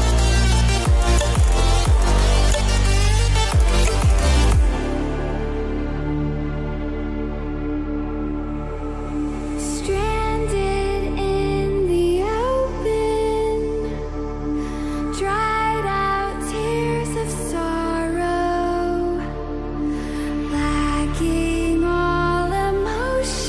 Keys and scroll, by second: 0.0-2.2 typing, 0.7 ctrl+z, 1.2 ctrl+z, 6.7 ctrl+z, 8.3 ctrl+Return, 9.3 ctrl+0, 10.5 shift+F6, 11.9 Return, 12.4 ctrl+j.